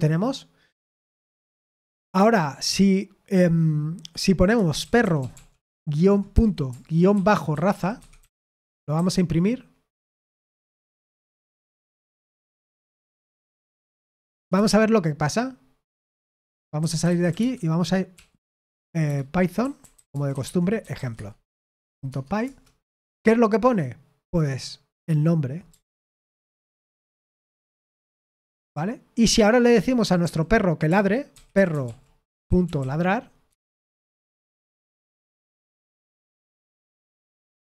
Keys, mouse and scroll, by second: 1.9 typing, 4.2-14.7 typing, 16.7-22.2 typing, 22.4 Return, 26.1 ctrl+p, 26.5 ctrl+p, 27.3 Return, 28.6-36.1 typing, 33.4 Tab, 34.2 Escape, 36.3 ctrl+p, 36.7 Return.